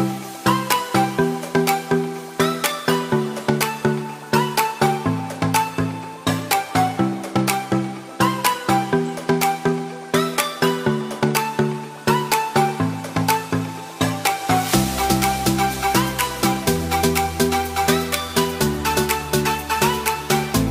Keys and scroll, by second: 13.2 [.